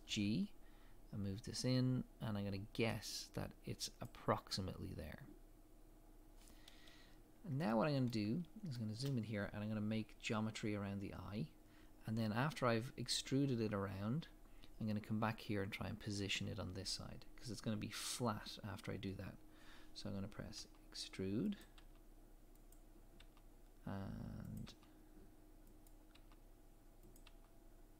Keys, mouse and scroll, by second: 0.1 g, 7.2-7.6 scroll up 1, 7.6 shift+middle click, 8.3 scroll up 1, 8.8 shift+middle click, 9.1-10.2 scroll up 1, 20.6 e.